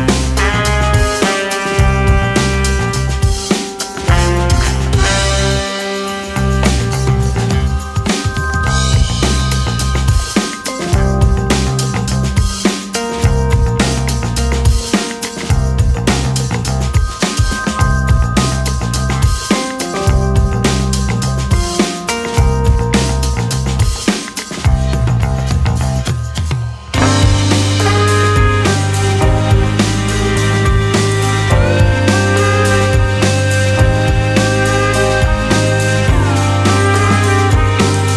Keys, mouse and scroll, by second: 1.1 click, 2.1 g, 11.2 middle click, 12.0 Tab, 12.5 right click, 13.5-15.6 middle drag, 15.6 KP_3, 16.2 Tab, 16.6 1, 17.0 alt+z, 17.3 click, 18.5 s, 20.5 o, 21.2 s, 23.2 Tab, 24.2 alt+z, 24.8-25.7 scroll down 3, 25.7-27.3 middle drag, 27.3-27.9 scroll up 3, 27.9 Tab, 30.6 2, 31.0 click, 32.0 shift+click, 32.9 o, 34.4 KP_7, 35.8 s.